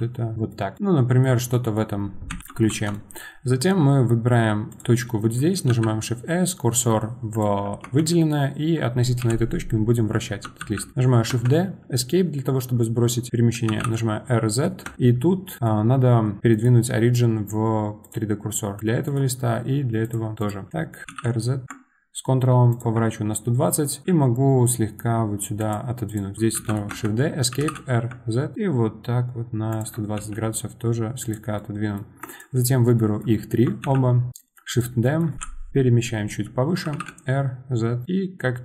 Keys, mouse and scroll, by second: 0.3 middle drag, 0.5 scroll down 1, 0.7-1.2 middle drag, 1.2 scroll down 1, 1.5-2.3 middle drag, 2.3 KP_7, 2.4 shift+middle click, 2.7 Tab, 2.9 middle click, 3.3-3.8 scroll up 2, 4.2 1, 4.7 click, 5.7 shift+s, 7.8 Tab, 8.0 middle drag, 8.3 scroll down 2, 9.2 KP_7, 10.6 shift+d, 15.7-16.0 scroll down 1, 16.5-18.8 right drag, 18.8 click, 19.0-20.4 right drag, 20.4 click, 21.0 r, 24.0 g, 26.1 click, 26.5 shift+d, 29.7 r, 30.1 g, 32.2 drag, 32.9 middle click, 33.8 shift+d, 35.0 middle click.